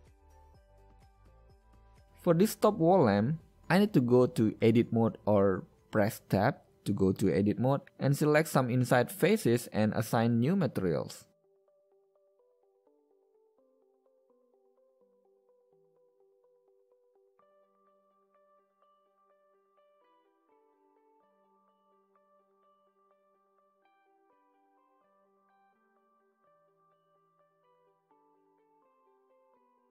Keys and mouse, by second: 1.0 middle click, 10.4 l, 11.6 middle click, 14.8 l, 18.3 middle click, 18.8 l, 20.8-21.4 drag, 25.7-29.9 middle drag.